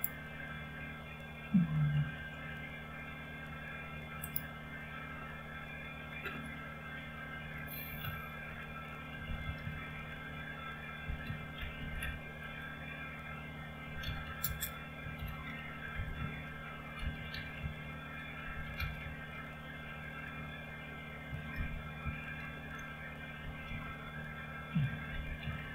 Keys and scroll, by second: 7.9-12.5 typing, 13.7-19.3 typing, 21.2 Caps_Lock, 21.3-25.7 typing, 22.6 Return, 24.9 Caps_Lock.